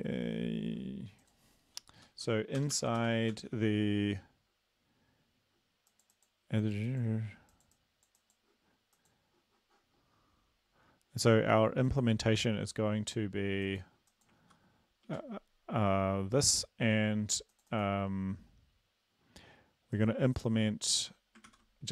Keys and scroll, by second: 2.6 Return, 2.8 Return, 3.0 ctrl+v, 3.4 ctrl+s, 14.5 ctrl+v, 15.2 ctrl+s, 21.1 Return, 21.5 ctrl+v.